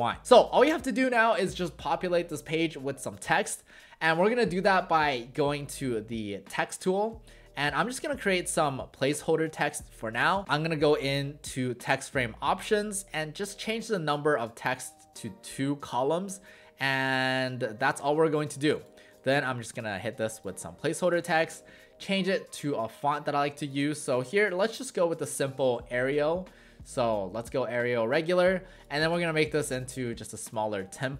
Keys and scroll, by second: 21.4 ctrl+a, 23.7-25.0 typing.